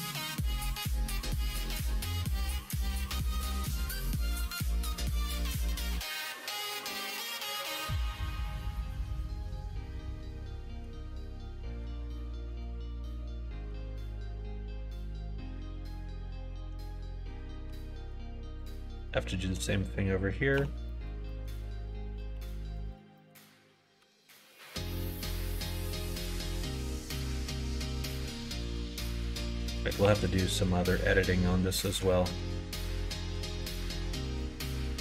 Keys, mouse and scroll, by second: 1.7 l, 2.6 k, 6.0 click, 6.7 middle click, 7.7 middle click, 8.1 middle click, 8.7 middle click, 9.1-10.8 middle drag, 11.4 middle click, 12.5 click, 12.9 middle click, 17.6 2, 18.0 click, 19.0 shift+click, 20.5 f, 20.8 middle click, 21.2 middle click, 22.3 ctrl+r, 23.2 middle click, 24.0 1, 24.5 shift+click, 24.7 middle click, 25.8 middle click, 27.5 3, 29.2 click, 30.0 2, 30.2 click, 30.5 middle click, 32.1-33.7 ctrl+middle drag, 32.3 ctrl+b, 34.4 middle click.